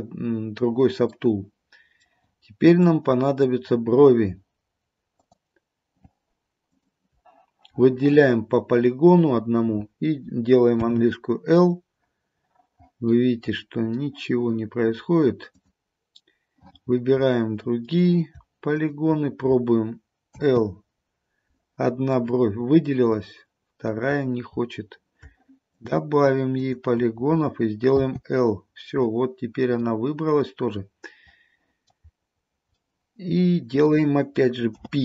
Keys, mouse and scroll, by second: 1.3 middle click, 1.7 middle click, 2.9 click, 5.3 click, 6.8 shift+click, 7.1 shift+click, 10.9 l, 13.3 middle click, 15.6 click, 17.3 middle click, 18.9 shift+click, 20.5 l, 22.1 scroll down 1, 22.3 middle click, 22.9 middle click, 24.2-24.6 scroll up 1, 24.6-25.2 scroll down 1, 25.9 shift+click, 28.1 l, 29.5 scroll down 1, 29.9 middle click, 30.0 middle click, 32.1-32.6 scroll down 2, 32.6 scroll up 1, 32.9 middle click, 34.9 p.